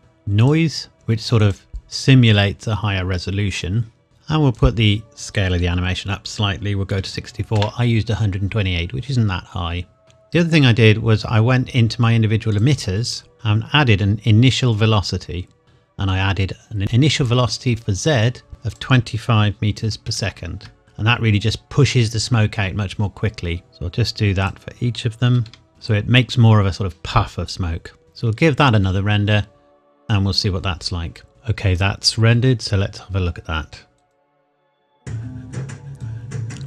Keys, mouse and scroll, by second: 0.4 click, 4.6 click, 6.9 KP_6, 7.1 KP_4, 7.6 KP_Enter, 10.0 scroll down 1, 12.6 click, 14.5 click, 18.7 click, 19.9 KP_2, 20.1 KP_4, 20.8 KP_Enter, 23.6 click, 25.3 KP_2, 25.5 KP_5, 28.0 click, 31.3 click, 31.8 click.